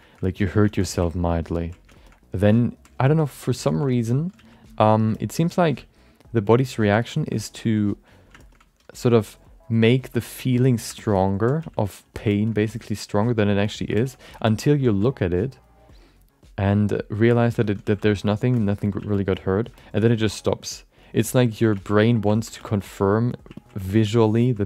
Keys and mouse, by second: 0.7 shift+middle click, 1.1 click, 1.4 click, 2.0 middle click, 2.5 ctrl+click, 3.0 alt+middle click, 3.2 alt+middle click, 3.9 alt+shift+middle click, 4.1 alt+middle click, 4.3 f, 4.8 click, 5.1 middle click, 5.3 middle click, 5.6 f, 6.0 click, 6.6 ctrl+click, 7.1 alt+shift+middle click, 7.3 alt+middle click, 7.6 click, 8.1 click, 8.4 alt+shift+middle click, 9.0 click, 9.4 click, 9.9 ctrl+click, 10.3 click, 10.6 click, 11.0 alt+shift+middle click, 11.1 middle click, 11.6 f, 11.8 click, 12.1 click, 12.3 middle click, 12.4 middle click, 12.8 click, 13.0 click, 13.4 click, 13.7 click, 13.9 shift+middle click, 14.1 alt+middle click, 14.4 shift+middle click, 14.6 middle click, 14.9 f, 15.6 click, 16.0 click, 16.6 click, 17.3 alt+shift+middle click, 17.5 middle click, 17.8 f, 18.0 click, 18.3 click, 18.5 shift+middle click, 18.7 alt+middle click, 19.0 f, 19.2 click, 19.7 alt+shift+middle click, 20.2 click, 20.5 click, 21.0 click, 21.5 ctrl+alt+shift+middle click, 22.0 alt+middle click, 22.3 ctrl+middle click, 22.6 shift+middle click, 22.8 alt+middle click, 23.5 ctrl+alt+middle click, 23.8 shift+middle click, 24.0 alt+middle click, 24.4 ctrl+middle click.